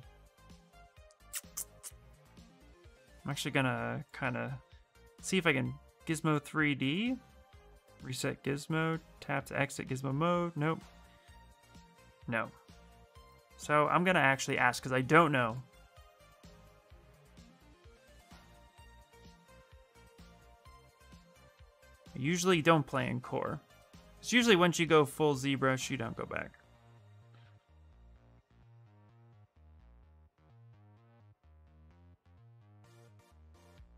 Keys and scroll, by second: 27.1 q, 31.0 w.